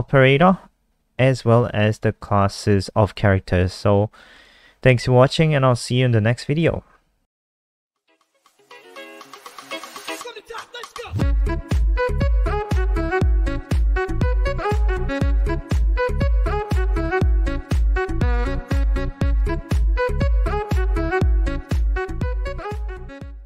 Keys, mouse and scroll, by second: 0.6 click, 4.1-4.6 scroll down 1, 5.2 click.